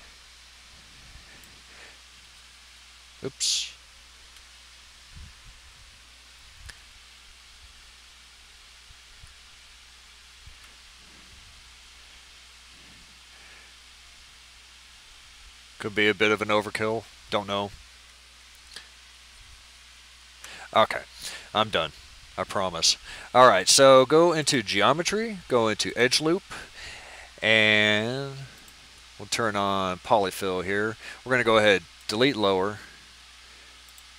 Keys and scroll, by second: 4.2 ctrl+z.